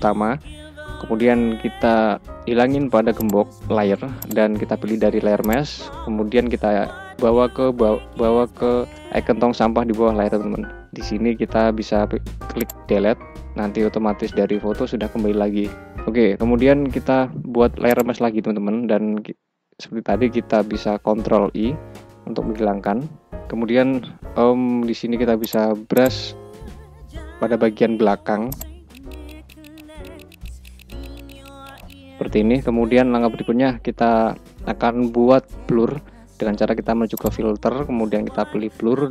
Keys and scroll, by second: 20.9 ctrl+i, 24.3 ], 27.9 ctrl+z.